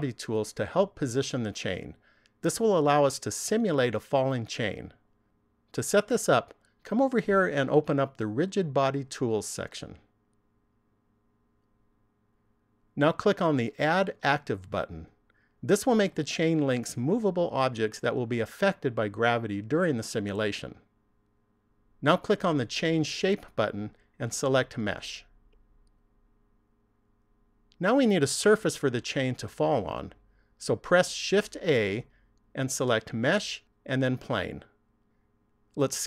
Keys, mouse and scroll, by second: 7.0 click, 9.5 click, 11.2 click, 15.1 click, 23.5 click, 31.4 shift+a.